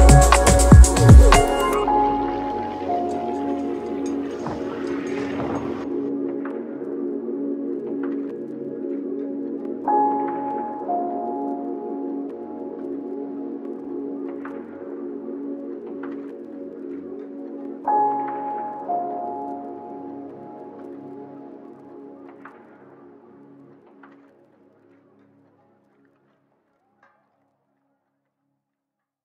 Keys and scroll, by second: 1.2-4.3 typing, 5.3 shift+a, 5.8 s, 6.7 s, 11.8 shift+u, 11.9 s, 12.4 w, 12.7 d, 14.1 ctrl+c, 14.2 ctrl+v, 14.7 g, 17.4 shift+u, 18.2 d, 18.4 s, 20.0 shift+u, 20.2 d, 21.1 s, 21.8 d, 26.8 u, 26.9 m, 27.1 space.